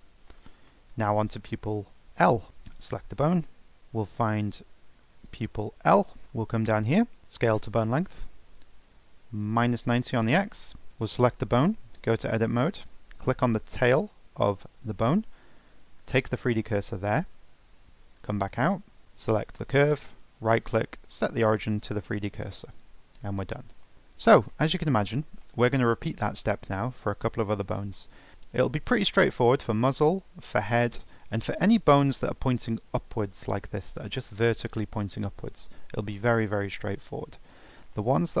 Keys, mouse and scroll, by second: 1.0 scroll up 2, 1.4-2.5 shift+middle drag, 2.5 ctrl+Tab, 2.8 click, 3.8-6.2 drag, 6.2 middle click, 6.4-7.2 scroll down 4, 7.2 click, 8.4-10.9 drag, 11.7 Tab, 12.8 click, 15.7 shift+s, 18.0 Tab, 19.0 click, 20.0-22.7 right drag, 22.7 click, 23.1 scroll down 3, 23.4-28.3 middle drag, 28.3 scroll up 1, 28.4-29.4 shift+middle drag, 29.4-30.1 scroll down 2, 31.3-32.1 scroll up 1, 32.1 click, 35.5-35.8 scroll down 2, 35.8 scroll up 2, 36.1-36.5 shift+middle drag, 36.5-37.0 shift+scroll down 1, 37.5 click, 37.9-38.4 shift+middle drag.